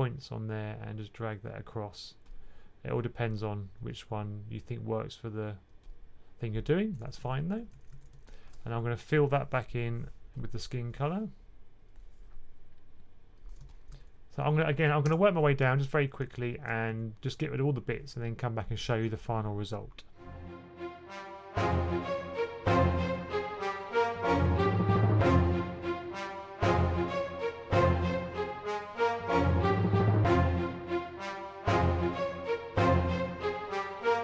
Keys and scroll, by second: 6.9-7.8 typing, 13.8 1, 16.7 2, 20.8-23.9 typing, 24.5 super+z, 25.0 super+z, 28.0-28.9 typing, 30.4-34.2 typing.